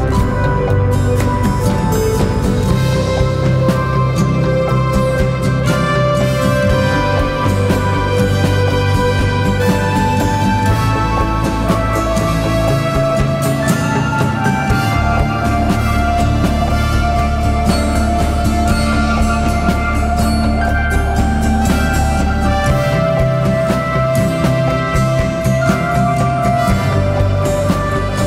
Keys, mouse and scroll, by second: 4.8 typing, 9.5 typing, 24.4 typing, 24.8 ctrl+-.